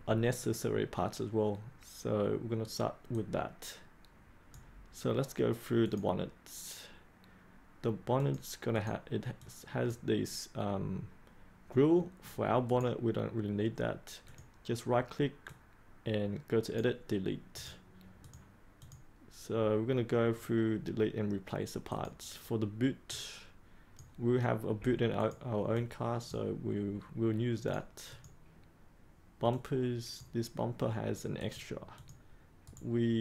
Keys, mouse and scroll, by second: 12.6 right click, 14.2-17.1 drag, 17.5 right click, 18.2-25.7 drag, 32.6 right click.